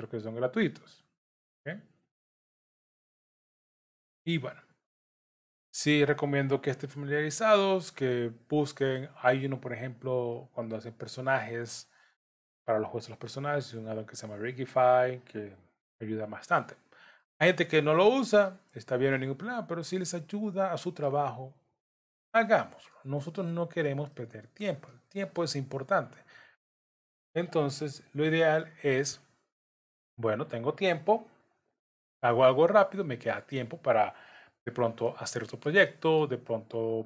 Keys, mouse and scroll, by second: 0.1 click, 1.0 shift+click, 2.0 j, 2.7 click, 3.4 shift+click, 4.1 j, 4.8 click, 5.6 shift+click, 6.6 j, 6.9 middle click, 8.2 click, 8.9 shift+click, 9.9 j, 10.3 middle click, 11.3 click, 13.3 j, 13.8 click, 14.7 shift+click, 15.9 j, 16.8 scroll down 1, 17.2 middle click, 18.7-19.1 scroll down 3, 19.1 middle click, 20.4 middle click, 21.1 scroll down 2, 22.2 shift+middle click, 22.5 shift+middle click, 22.9 middle click, 23.7-24.2 scroll up 3, 24.1 shift+middle click, 24.9 middle click, 26.0 click, 27.0 shift+click, 28.0 j, 28.6 middle click, 29.6 click, 30.4 shift+click, 31.7 j, 32.8 click, 33.4 shift+click, 34.5 j, 35.1 middle click, 35.9 shift+middle click.